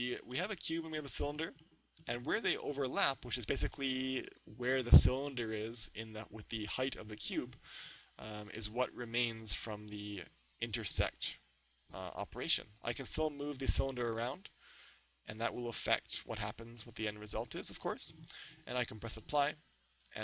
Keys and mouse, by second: 8.6-10.2 drag, 13.5 right click, 14.4-16.1 drag, 16.2 right click, 16.8-18.6 middle drag, 19.2-20.2 drag.